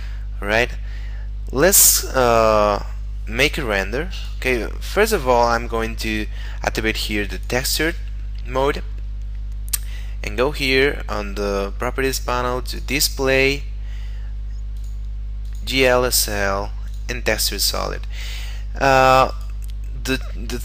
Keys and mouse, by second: 4.1 click, 7.3 click, 9.1 middle click, 12.7 click, 13.5 middle click, 14.7 click, 18.6 middle click, 19.4 right click.